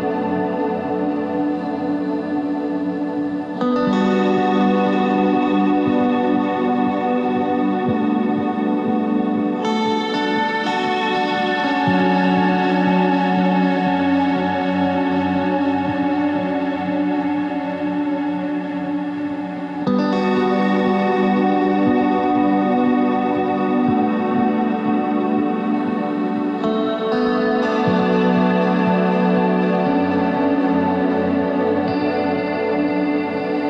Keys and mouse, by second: 5.3 ctrl+Tab, 5.7-7.1 drag, 7.1 KP_3, 7.6 KP_1, 8.0 ctrl+Tab, 8.9 z, 10.4 c, 12.7 z, 13.0 ctrl+Tab, 13.8 z, 14.5 z, 17.5-18.5 drag, 18.1 i, 19.2 e, 20.3 ctrl+z, 21.3 e, 25.3 Tab, 28.3 Tab, 30.3 shift+right click, 33.1 s.